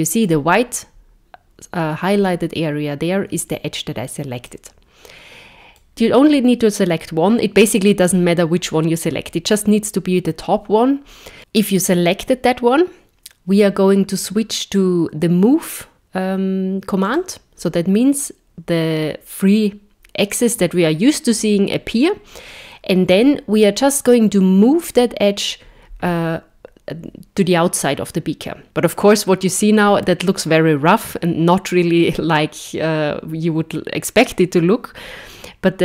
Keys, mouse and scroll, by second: 4.5 middle click, 5.9 middle click, 5.9-7.9 scroll down 2, 17.1 click, 25.5 click.